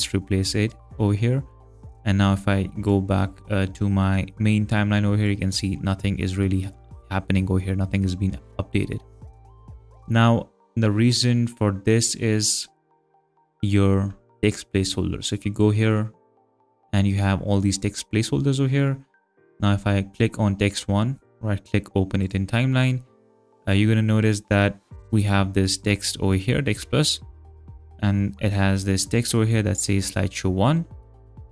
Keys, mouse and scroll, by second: 2.8 click, 5.2 click, 9.4 click, 12.7 click, 15.5 click, 19.4 click, 21.2 right click, 22.2 click, 25.2 click, 25.8 click, 27.3 click.